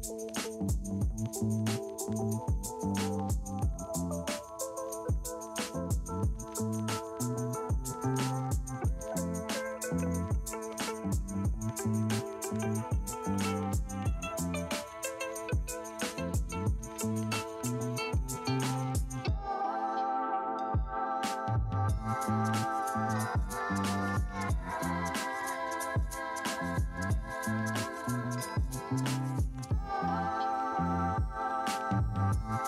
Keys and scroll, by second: 0.5 space, 1.0 [, 2.7 3, 5.5-7.6 typing, 22.6 space, 28.0 space.